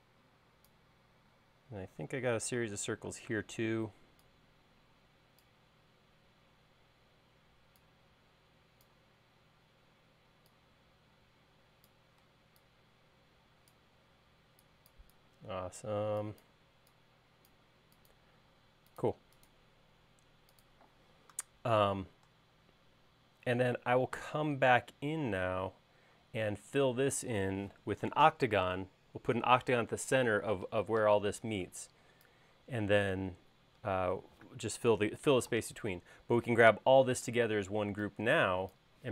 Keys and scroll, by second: 2.7 c, 12.3 e, 21.3 space, 24.3 space, 31.4 e, 37.4 space.